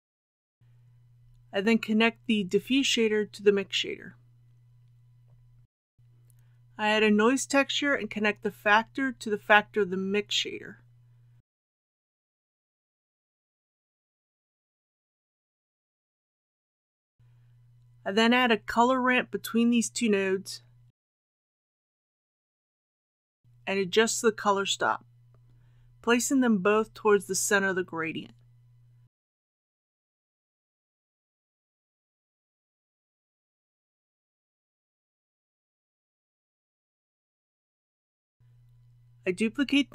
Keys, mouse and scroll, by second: 6.5 shift+a, 9.5-16.5 drag, 18.2 shift+a, 21.3-37.7 drag.